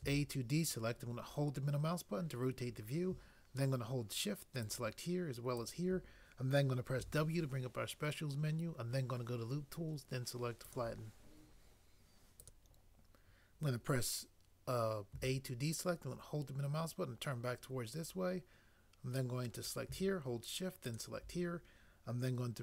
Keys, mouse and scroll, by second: 0.0 a, 4.6 click, 7.0 w, 15.1 a, 20.9 shift+click.